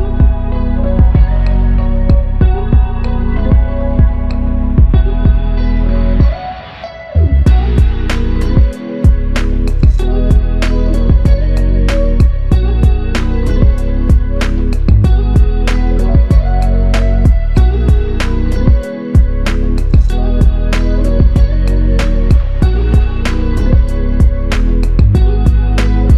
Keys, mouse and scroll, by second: 1.2 double click, 4.6 double click, 7.6 ctrl+click, 10.0 double click, 12.3 double click, 21.9 double click, 23.1 click, 23.2 alt+click.